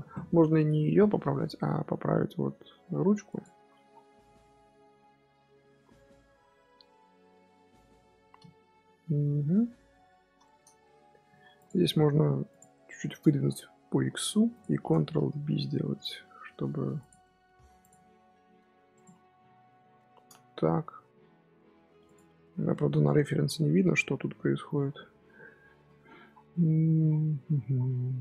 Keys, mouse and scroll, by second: 0.0 shift+middle drag, 0.2 scroll down 1, 0.3-0.8 scroll up 6, 0.8 z, 1.2-1.7 scroll up 1, 1.7 g, 3.5-4.1 scroll down 6, 4.1 scroll up 1, 4.3 KP_7, 4.8 scroll down 1, 4.9-5.6 scroll up 1, 5.6 z, 5.9-10.7 middle drag, 10.7 scroll up 1, 10.8-11.2 middle drag, 11.2 Tab, 11.4 3, 11.5 click, 11.7 middle click, 12.4 click, 12.7 middle click, 13.4-13.8 scroll up 4, 13.8 g, 15.1 ctrl+b, 17.1 middle click, 17.5 3, 17.7 click, 18.4 s, 19.8 i, 22.3 middle click, 22.9 Tab, 23.1-23.6 scroll down 3, 23.6 Tab, 23.9 scroll up 1, 23.9 scroll down 1, 24.0-25.1 scroll up 1.